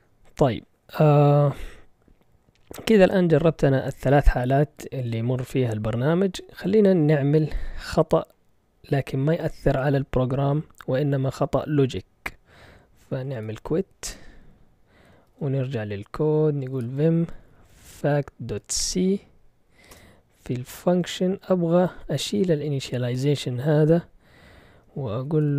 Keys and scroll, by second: 12.8-13.9 typing, 14.1 Return, 15.3 ctrl+l, 16.4-18.8 typing, 19.9 Return, 21.9 Down, 25.4-25.5 typing.